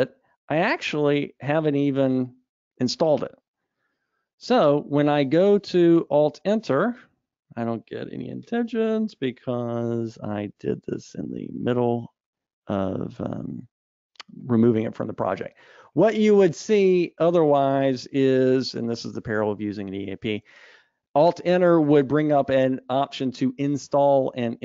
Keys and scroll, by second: 6.3 alt+Return.